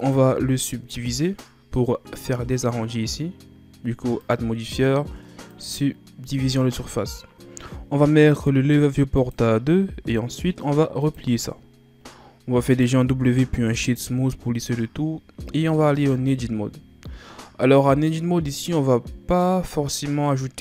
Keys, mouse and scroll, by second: 0.9-4.0 drag, 4.2-7.2 drag, 9.1-13.0 drag, 13.0 w, 15.9 Tab, 18.5-20.6 drag.